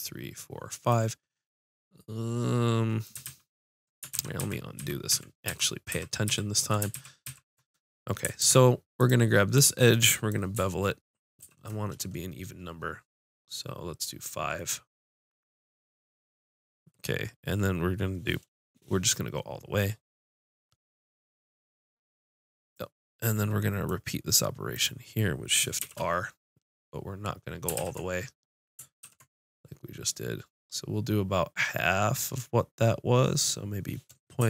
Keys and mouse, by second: 3.2 ctrl+z, 4.1 ctrl+z, 4.4 ctrl+z, 4.8 ctrl+z, 5.1 ctrl+z, 5.5 ctrl+z, 5.9 ctrl+z, 6.3 ctrl+z, 6.9 ctrl+z, 7.3 ctrl+z, 8.4 ctrl+Tab, 9.4-10.8 drag, 11.4 ctrl+b, 22.7 click, 23.3 middle click, 24.7-25.8 drag, 25.8 shift+r, 27.8 ctrl+z, 29.1 ctrl+b.